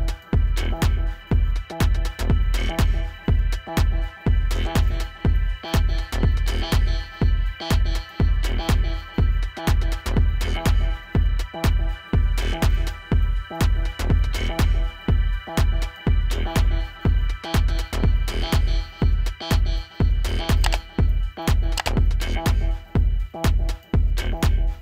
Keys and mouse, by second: 0.8 right click, 2.2 click, 3.2 -, 4.1 t, 5.2 ctrl+-, 5.3-6.7 typing, 6.0 alt+click, 6.9 click, 9.6 alt+click, 10.1 Return, 11.3 click, 15.4 click, 19.7 click, 21.6 ctrl+=, 22.1 s, 22.1 space, 22.2 click, 22.6 space, 23.8 click.